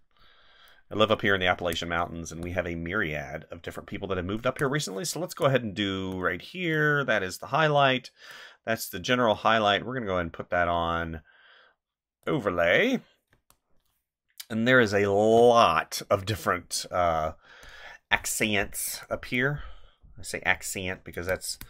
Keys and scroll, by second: 1.5 space, 4.4 space, 13.3 space, 18.2 space, 21.1 space.